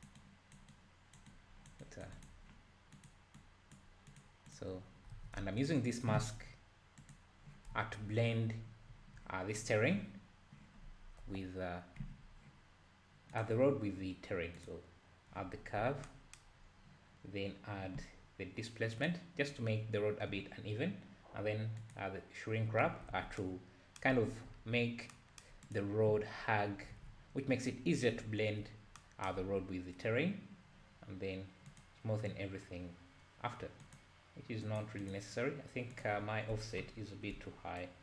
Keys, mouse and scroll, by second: 4.1-5.1 drag, 5.1 alt+a, 5.4 `, 5.6 drag, 7.0 click, 7.7 `, 8.9 `, 11.3 KP_Divide, 13.3 click, 14.6 click, 15.8-16.1 scroll up 6, 16.6-17.7 scroll down 1, 17.7 scroll down 1, 19.0 click, 21.8 click, 23.2 alt+a, 24.5 `, 25.7 click, 26.4-26.9 scroll up 1, 26.9 alt+a, 28.1 `, 31.7 click, 33.9 click, 34.7 click, 35.1 click, 35.9-37.0 drag, 37.0-37.8 scroll down 2, 37.8-38.0 shift+drag.